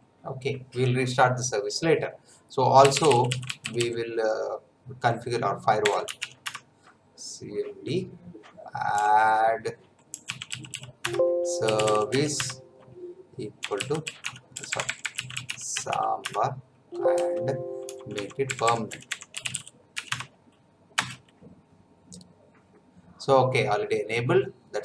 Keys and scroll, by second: 2.6-4.1 typing, 5.6-6.7 typing, 8.9-20.4 typing, 11.0 Tab, 20.9 Return.